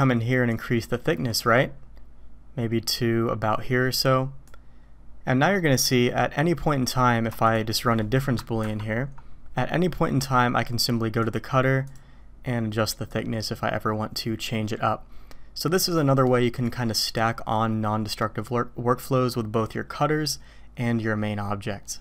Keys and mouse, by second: 0.5-4.5 drag, 5.5 click, 7.4 shift+click, 8.6 ctrl+KP_Subtract, 11.2 click, 11.8 click, 13.2-16.6 drag.